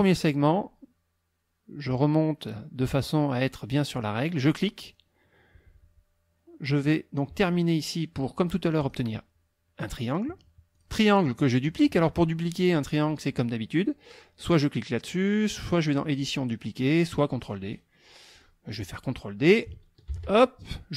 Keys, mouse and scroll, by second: 4.5 click, 8.8 click, 10.7 click, 15.5 click, 18.3 click, 20.1 ctrl+d.